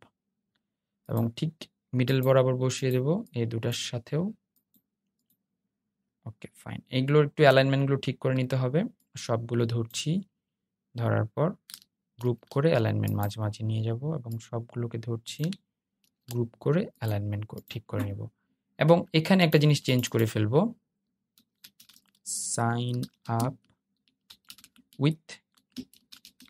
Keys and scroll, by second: 11.3 super+g, 15.1 super+g.